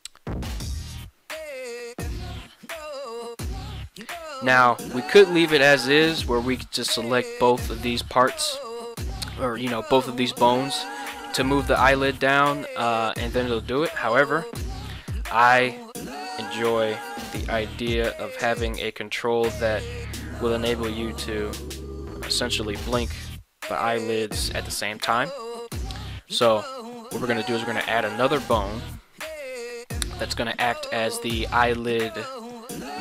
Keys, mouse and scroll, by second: 1.5 g, 1.9 z, 4.6 click, 5.9-6.4 middle drag, 6.7-7.1 middle drag, 9.5-9.9 middle drag, 10.3-10.8 middle drag, 11.6 middle click, 14.7 KP_1, 26.0 alt+g, 27.7 Tab, 28.3 middle click, 29.4 KP_3, 32.5 right click.